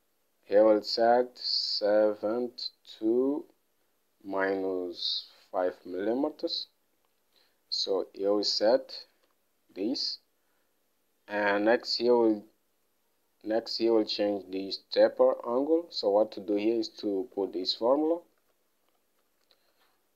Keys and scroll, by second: 6.5 alt+Tab, 8.4-10.2 typing, 17.9-19.3 typing.